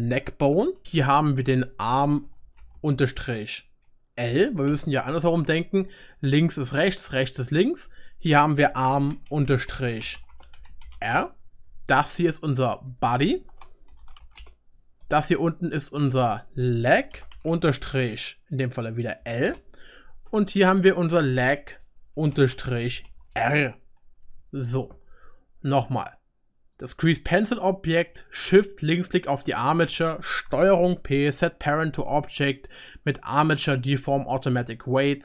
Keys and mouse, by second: 1.1 click, 1.1 middle click, 1.1 right click, 1.5 F2, 1.8 click, 2.2 shift+click, 2.2-9.5 shift+right drag, 8.6 F2, 9.5-11.4 shift+drag, 10.1 BackSpace, 10.3 BackSpace, 12.4 click, 12.9 F2, 13.3-17.5 shift+drag, 16.2 F2, 17.5-20.6 shift+right drag, 20.6 click, 20.8-33.4 drag, 24.4 Tab, 30.8 ctrl+p, 34.3 click.